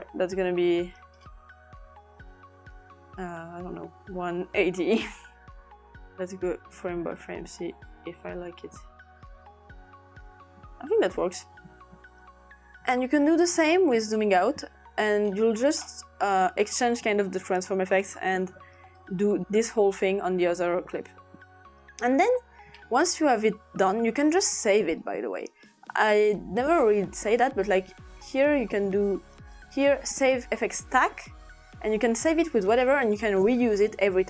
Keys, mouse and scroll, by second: 0.6 click, 3.9-5.1 typing, 5.8 click, 6.3 Tab, 6.5 Right, 6.6 Right, 7.1 Right, 7.5 Right, 7.8 Right, 8.2 Right, 8.4 Right, 8.6 Right, 8.9 Right, 9.0-10.5 Right, 14.1-14.8 ctrl+scroll down 2, 15.8-17.2 scroll up 1, 19.0-20.0 drag, 22.8-24.2 scroll up 1, 25.0-27.5 drag, 29.4-30.6 drag, 31.0 click, 32.9 click.